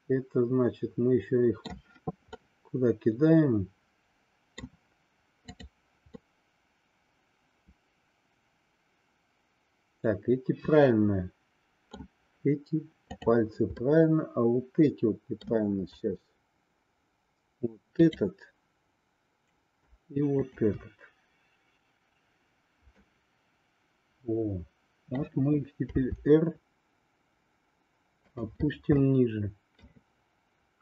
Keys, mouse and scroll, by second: 2.3-3.4 middle drag, 3.9 middle click, 5.4 click, 6.0-12.1 middle drag, 13.8-15.6 middle drag, 17.9-19.3 drag, 20.4-21.8 shift+drag, 23.1-25.3 middle drag, 25.9 r, 29.1 middle click.